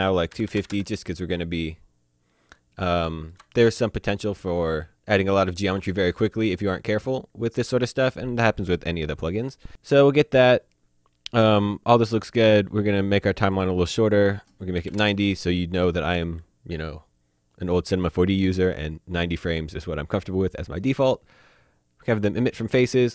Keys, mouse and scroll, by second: 0.4 KP_2, 0.5 KP_5, 0.6 KP_0, 0.7 KP_Enter, 2.2-2.6 scroll up 1, 2.8 shift+middle click, 3.6 middle click, 4.6 shift+middle click, 13.5 click, 14.8 KP_9, 14.9 KP_0, 15.0 KP_Enter.